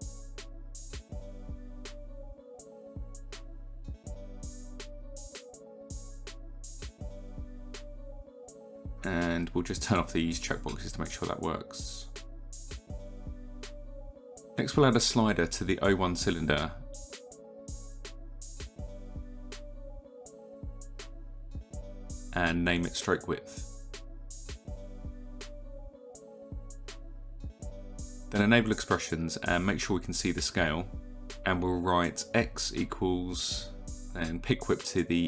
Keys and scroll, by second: 12.2 ctrl+z, 18.8-20.1 typing, 22.4 Return, 22.8-24.9 typing, 25.0 Return, 26.4 typing.